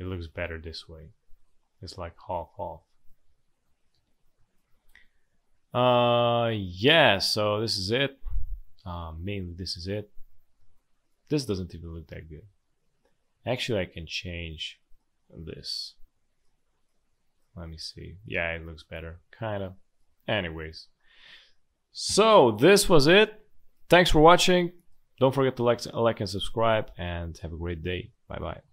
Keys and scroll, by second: 3.9 space, 5.3 space, 8.3 space, 10.5 space, 17.7 space, 19.7 space, 22.0 Delete, 23.0 space, 25.8 space.